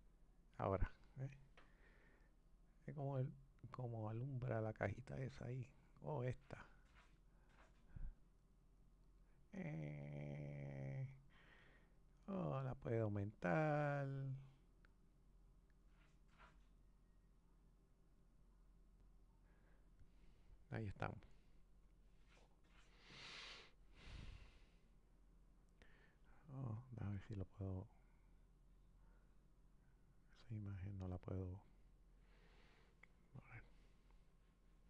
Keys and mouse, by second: 12.2 click, 26.6 click.